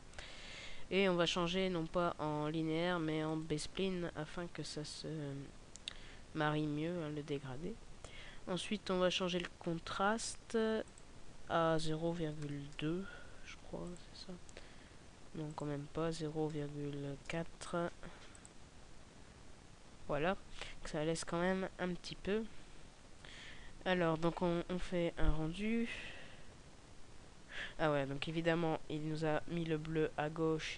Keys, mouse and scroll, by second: 10.8 click, 15.3 click, 21.4-22.3 scroll down 1, 23.4-24.6 scroll down 3.